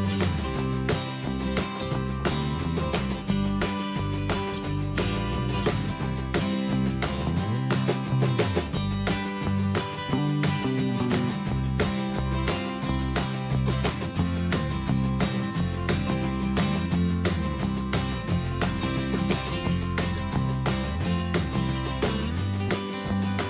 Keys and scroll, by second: 2.7 Tab, 17.1 alt+Tab, 22.0 ctrl+v, 22.5 alt+Tab, 23.2 ctrl+c.